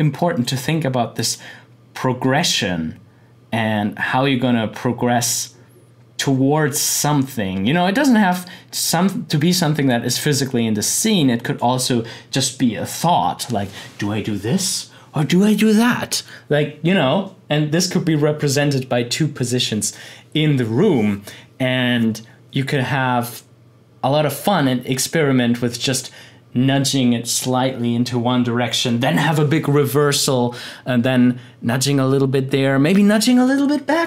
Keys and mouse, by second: 9.9-12.3 drag.